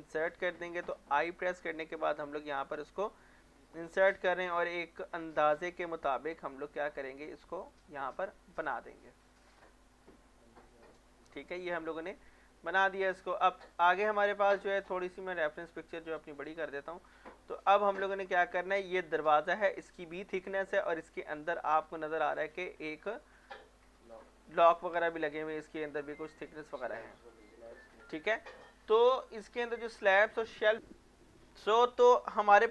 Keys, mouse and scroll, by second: 1.1 |, 7.6 click, 8.1 scroll down 1, 8.4 middle click, 12.0 middle click, 12.8-13.7 scroll down 1, 13.7 click, 18.0 scroll up 1, 20.4 scroll down 1, 21.4 scroll down 1, 22.2 click, 23.1 scroll up 1, 24.7-25.1 scroll down 1, 26.6-26.9 scroll down 1, 30.7 click, 31.9 middle click, 32.3 scroll up 1, 32.6 middle click.